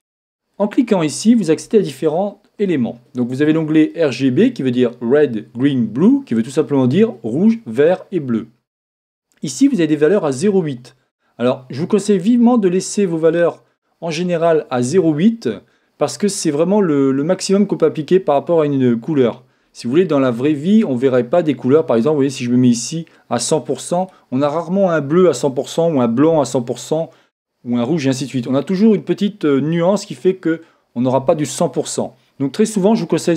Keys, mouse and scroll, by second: 0.5-2.3 drag.